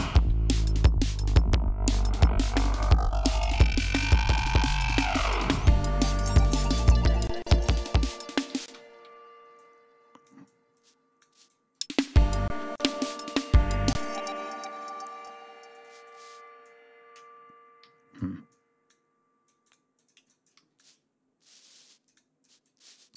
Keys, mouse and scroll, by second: 0.4 ctrl+scroll down 3, 1.7 scroll down 2, 3.1-3.7 drag, 4.0 scroll up 2, 7.1 space, 7.2 click, 8.3 d, 8.5 space, 8.6 ctrl+scroll up 1, 9.4-10.8 drag, 11.0 click, 11.6 space, 12.3 space, 12.5 click, 13.7 space, 14.6 click, 15.5 click, 17.6 g, 18.0 click, 18.7 click, 19.8 click, 20.4 d, 20.6-23.1 drag.